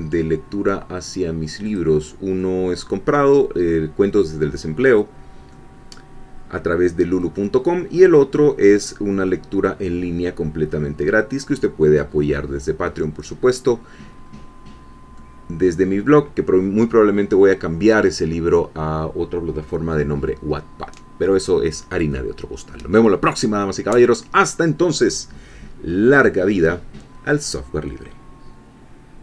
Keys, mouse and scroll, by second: 1.7 click, 2.4-5.0 middle drag, 5.1-5.5 scroll down 1, 5.5-7.3 middle drag, 7.5-7.9 scroll up 1, 8.5-9.9 middle drag, 9.9-10.2 scroll down 1, 10.6-11.3 scroll up 1, 11.3-14.1 scroll down 1, 14.1-14.5 scroll up 1, 14.7-15.1 scroll down 1, 15.1-16.2 middle drag, 25.9-26.2 scroll down 1, 26.2-28.1 middle drag.